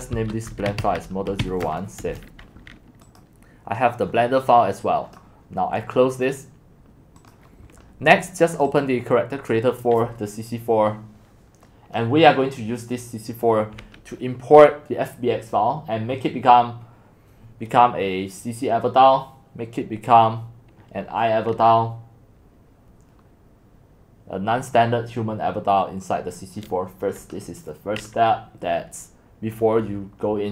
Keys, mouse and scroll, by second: 0.0-2.1 typing, 3.2-4.8 drag, 5.0 scroll down 1, 7.2 click.